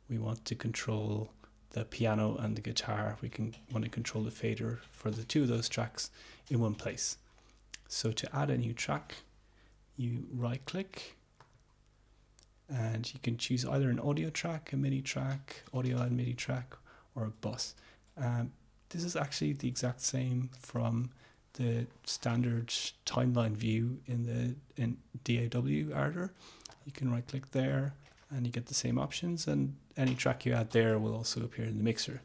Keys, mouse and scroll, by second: 11.6 scroll up 1, 11.9 middle click, 14.3-18.3 middle drag, 19.3 click, 19.6 middle click, 20.0 alt+Tab, 26.8 scroll up 2, 28.3-28.6 scroll up 2, 30.2 click.